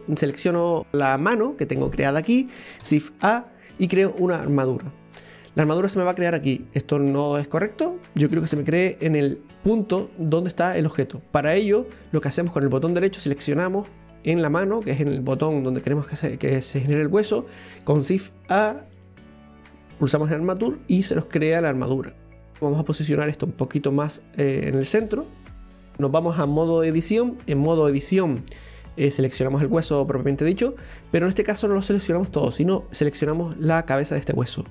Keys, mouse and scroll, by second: 0.0 right click, 2.8 shift+a, 8.5 Delete, 12.9 click, 18.0 shift+a, 22.6-25.4 drag, 28.3 right click, 33.0 right click.